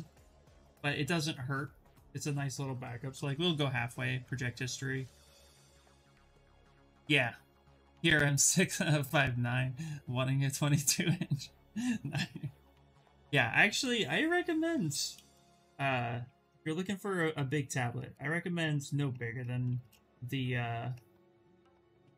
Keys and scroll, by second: 0.6 ctrl+d, 1.9 ctrl+z, 2.8 2, 16.9 s.